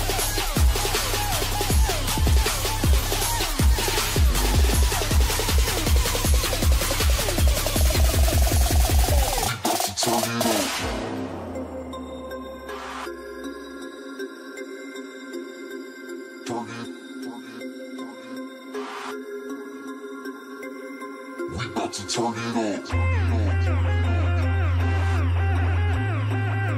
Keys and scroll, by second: 2.4 |, 13.3 |.